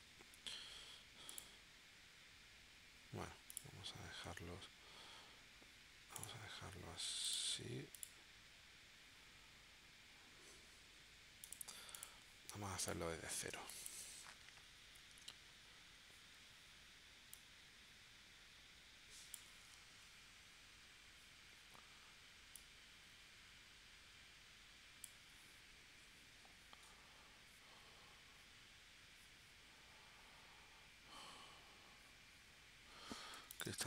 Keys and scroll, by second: 13.5 space, 15.4 shift+w, 33.4 v, 33.7 space.